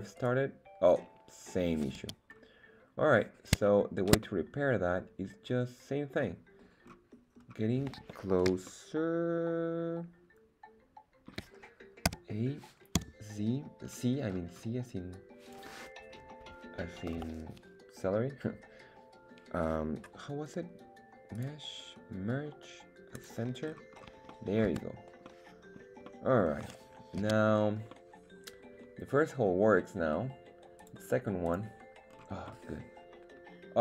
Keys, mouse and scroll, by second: 0.2 right click, 1.0 scroll down 2, 1.4 scroll up 2, 1.9 z, 2.3-3.1 scroll up 2, 3.5 scroll down 1, 3.6 shift+middle click, 4.9-6.3 middle drag, 6.7 scroll down 1, 7.3-8.1 scroll up 1, 8.6-11.5 ctrl+middle drag, 12.0 a, 12.9 c, 17.1 Escape, 21.3-23.3 drag, 23.6-24.2 scroll down 4, 24.3 middle click, 24.7 Tab, 25.3-25.8 middle drag, 26.1-26.7 middle drag, 27.2 z, 27.6 scroll up 2, 27.9-30.1 middle drag, 31.5 click, 32.0 scroll up 2, 32.4-33.8 middle drag.